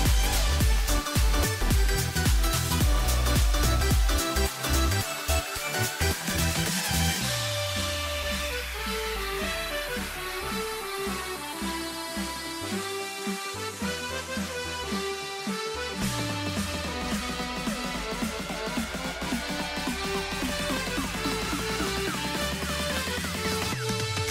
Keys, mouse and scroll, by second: 4.5 n, 4.7 scroll up 3, 4.8 middle click, 4.9 Tab, 5.1 shift+middle click, 5.6 ctrl+t, 6.3 ctrl+r, 8.1 middle click, 8.6 ctrl+r, 10.9 click, 11.1 middle click, 11.4-12.3 scroll up 1, 12.3 e, 12.7 s, 14.4 g, 16.9 e, 17.7 x, 18.7 middle click, 19.3 ctrl+r, 20.9 Tab, 21.5 ctrl+z, 21.7 ctrl+z, 21.9 ctrl+z, 22.2 ctrl+z, 22.4 Tab, 22.6 middle click, 22.8 a, 22.9 a, 23.0 scroll down 2, 23.0 middle click, 23.9 scroll up 3, 24.0-24.3 middle drag.